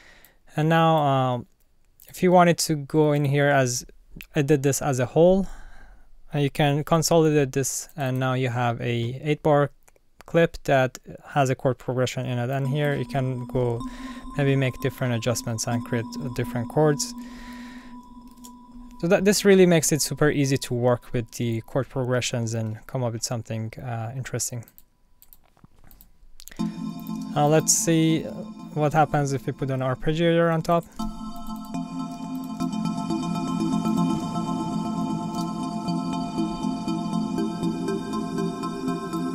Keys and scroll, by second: 6.8 super+j, 13.8 Up, 15.7 Down, 18.3 alt+super+l, 20.7 super+z, 26.6 space, 31.0 space, 32.1 space, 34.1 space, 34.6 Up, 35.3 space.